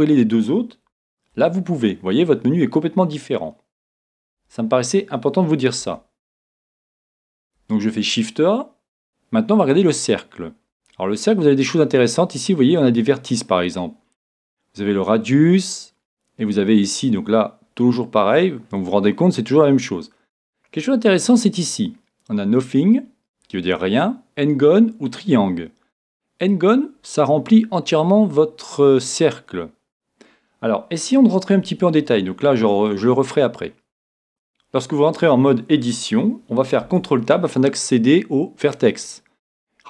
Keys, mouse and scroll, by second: 1.3 shift+a, 5.8 x, 7.6 shift+a, 21.3-23.2 drag, 27.4-29.8 middle drag, 29.7 scroll up 1, 31.6 Tab, 33.2-34.3 middle drag, 33.2-34.0 scroll up 1, 34.3 a, 36.8 ctrl+Tab.